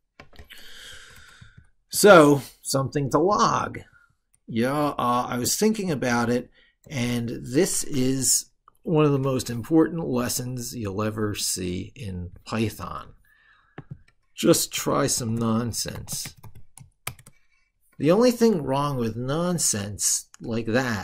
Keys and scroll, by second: 8.0 ctrl+super+Right.